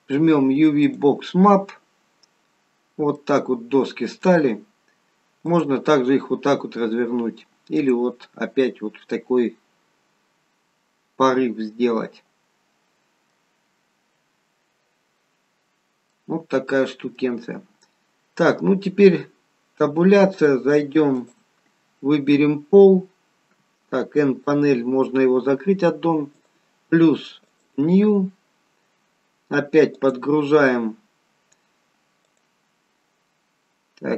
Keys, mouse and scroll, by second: 0.8 click, 2.2-3.1 scroll up 4, 3.1 middle click, 5.5 click, 7.8 click, 9.0 middle click, 13.8-14.9 scroll down 2, 15.4-16.1 scroll down 2, 16.1 middle click, 19.7 Tab, 20.5 middle click, 21.2 click, 21.9-23.1 scroll up 1, 23.3-23.9 scroll up 1, 24.2 n, 26.3 click, 27.5 click, 31.0 click, 31.0 scroll down 3, 32.3 click.